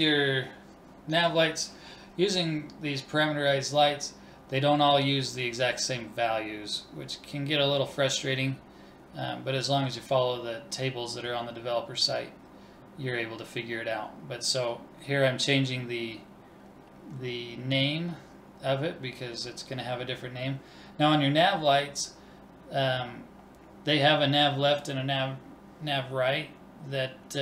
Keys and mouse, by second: 0.1 click, 11.3 BackSpace.